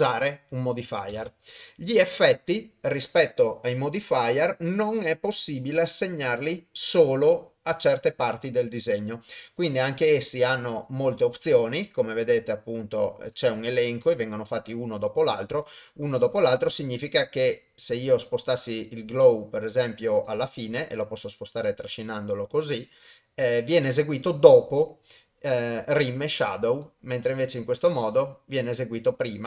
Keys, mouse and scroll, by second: 1.1 shift+space, 2.4 click, 12.9 click, 13.4 click, 14.1 drag, 16.2 click, 17.4 click, 19.3-19.8 drag, 20.2 click, 21.3-22.7 drag, 26.9-28.1 drag.